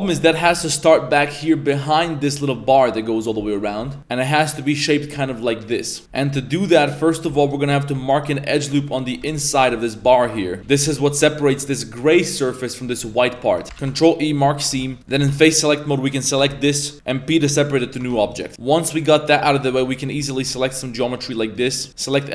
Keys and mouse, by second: 0.2 middle click, 0.4 3, 0.8 right click, 3.7 Tab, 3.8 middle click, 4.0 Tab, 6.0 z, 6.2 middle click, 6.7-7.0 middle drag, 7.1 1, 7.4 alt+right click, 8.5 middle drag, 8.9 middle click, 9.2 z, 9.4 middle drag, 9.9 middle click, 10.8 shift+z, 11.1 middle drag, 11.5 middle click, 13.6 ctrl+e, 13.6 z, 13.8 ctrl+e, 14.7 3, 15.0 middle click, 15.0 z, 15.2 a, 16.9 Tab, 16.9 ctrl+z, 16.9 p, 17.4 p, 18.0 Tab, 18.2 right click, 18.5 middle click, 18.7 middle click, 19.6 alt+right click, 20.0 alt+shift+right click, 20.5 alt+shift+right click, 21.2 alt+shift+right click, 21.6 alt+shift+right click, 21.9 c.